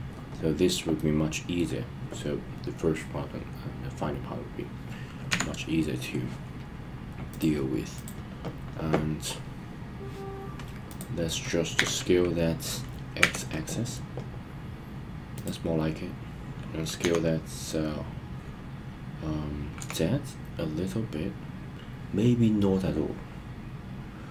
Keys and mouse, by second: 0.9-1.6 middle drag, 5.2 KP_1, 7.3 click, 10.8 click, 11.7 s, 13.1 x, 15.3 click, 17.0 s, 19.7 z.